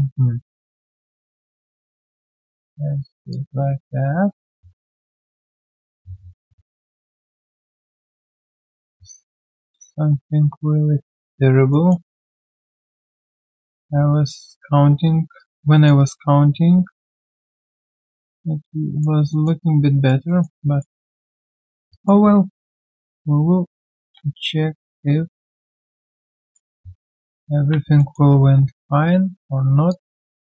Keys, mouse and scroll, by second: 11.7 alt+middle click, 12.1 alt+click, 15.3 alt+right click, 15.7 alt+middle click, 15.9 alt+right click, 19.3 alt+middle click, 19.6 alt+click, 20.2 alt+middle click, 20.6 alt+click, 21.0 alt+middle click, 21.3 alt+click, 21.9 alt+right click, 24.0 ctrl+z, 27.1 alt+middle click, 27.6 ctrl+z, 27.9 alt+middle click, 28.3 alt+q, 28.5-28.8 scroll down 1, 29.0 right click.